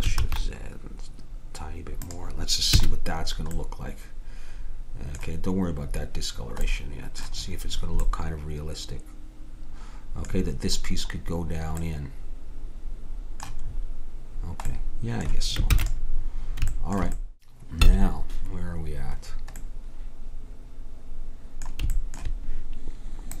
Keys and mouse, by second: 2.8 a, 6.7-8.3 middle drag, 15.7 ctrl+s.